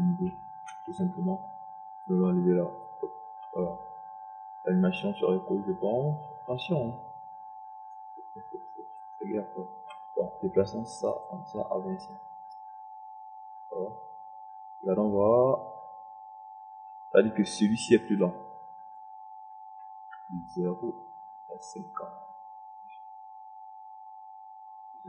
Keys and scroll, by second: 2.8 Delete.